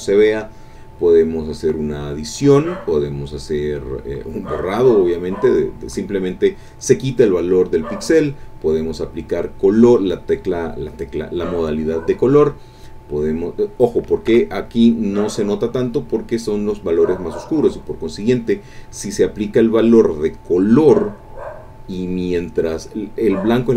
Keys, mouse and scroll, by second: 1.4 click, 2.8 click, 3.9 click, 5.4 click, 7.8 click, 10.2 click, 14.3 Escape.